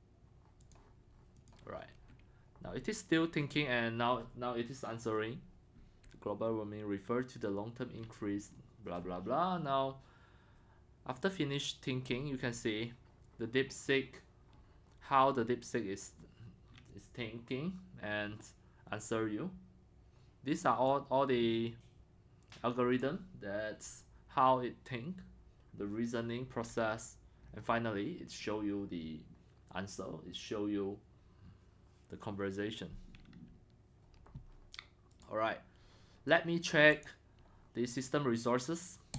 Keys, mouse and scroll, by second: 3.4-6.5 middle drag, 3.4-4.1 scroll down 4, 7.6-8.1 middle drag, 7.6-8.1 scroll down 4, 8.1 scroll, 11.2 click, 12.1 scroll, 12.5-16.4 middle drag, 23.0-27.4 drag, 27.4-27.9 middle drag, 27.4 scroll, 28.4 middle click, 28.7-29.3 scroll down 2, 29.8 scroll, 31.7 scroll, 32.1-32.6 middle drag, 35.2-35.9 right drag, 36.2 right drag, 36.4-37.1 right drag, 37.1-39.1 drag.